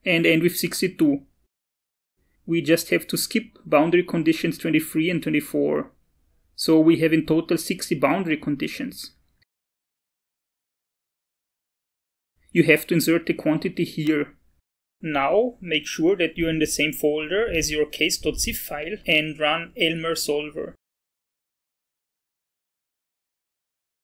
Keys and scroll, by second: 3.4-7.9 typing, 13.3 Left, 13.5 ctrl+s, 14.1 alt+Tab, 16.2 Up, 21.0 Return.